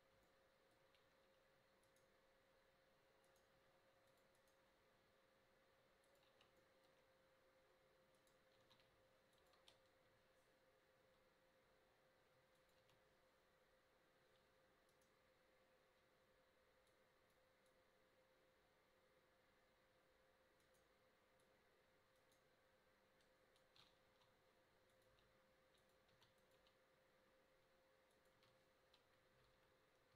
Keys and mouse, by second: 1.9 right click, 3.7 g, 4.6 g, 8.2 right click, 8.7 shift+d, 9.6 KP_0, 11.2 g, 12.9 a, 21.6-21.9 drag, 24.1 s, 25.1 g, 26.3 s, 26.6 g, 28.4 a.